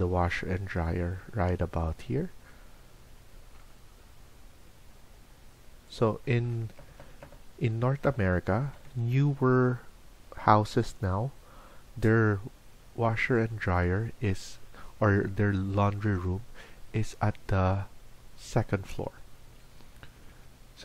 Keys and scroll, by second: 20.3 Escape.